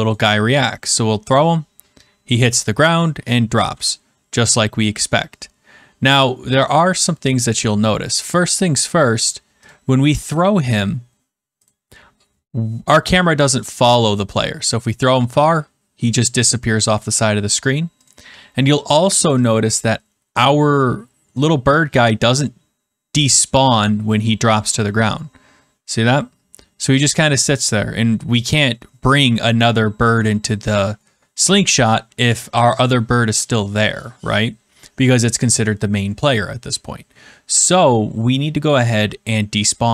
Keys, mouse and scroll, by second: 0.0-10.7 drag, 11.6-12.8 drag, 14.3-15.3 drag, 18.0-19.1 drag, 19.4-20.4 drag, 22.3-23.4 drag.